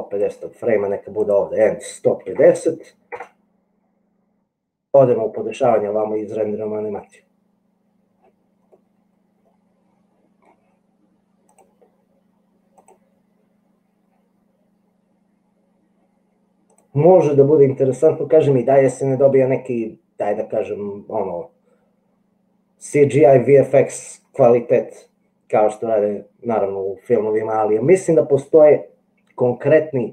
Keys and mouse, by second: 1.2-3.9 drag, 9.1 click, 9.4 middle click, 9.5 click, 9.6-10.8 middle drag, 12.9 click, 16.8 click.